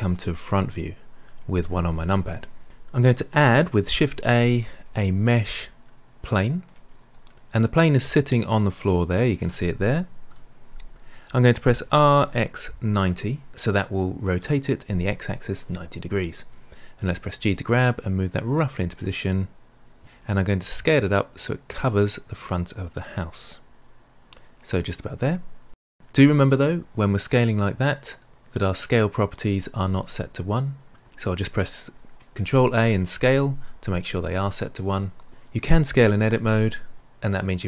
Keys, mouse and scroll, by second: 0.7 KP_1, 4.1 shift+a, 8.8-10.2 middle drag, 10.2 KP_1, 11.8 r, 16.9 g, 20.2 s, 22.6 g, 25.1 g, 26.5 n, 31.9 ctrl+a.